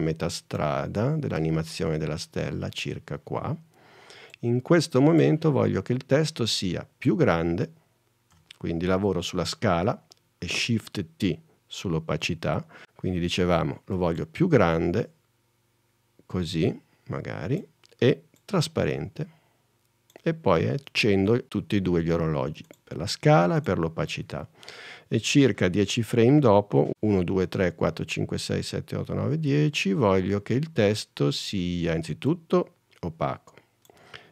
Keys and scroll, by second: 8.5 s, 12.3 shift+t, 26.9 shift+Left, 27.3 shift+super+Right.